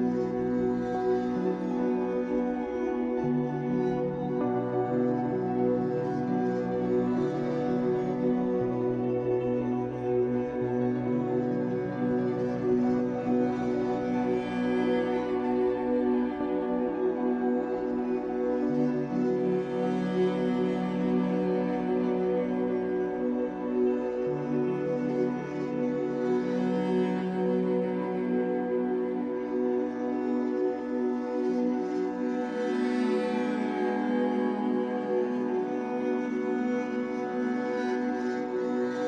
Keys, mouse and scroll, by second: 1.0-2.4 shift+middle drag, 2.4-9.5 drag, 9.1-9.5 scroll down 2, 9.5-12.2 middle drag, 9.8 scroll up 2, 10.9-11.6 scroll up 2, 11.6-12.2 scroll up 1, 12.2-18.3 drag, 18.3-23.0 middle drag, 18.9 scroll down 2, 20.0 scroll down 2, 20.7-22.4 scroll up 6, 22.4 scroll up 1, 22.7 f, 23.2-24.9 shift+drag, 24.7 scroll down 2, 24.9-37.4 shift+middle drag, 27.8 scroll down 2, 28.5-29.0 scroll up 2, 29.0-29.4 scroll up 1, 30.4 scroll down 2, 31.3 scroll down 1, 31.7-33.0 scroll up 1, 37.4 click.